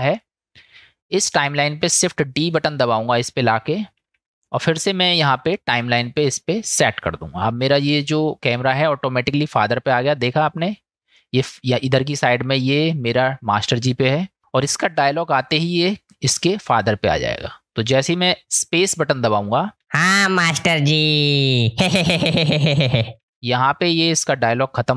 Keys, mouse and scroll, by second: 0.2 middle click, 4.0 shift+d, 6.8 click, 10.0-12.7 drag, 14.2-17.4 drag, 19.8 space, 23.2 space.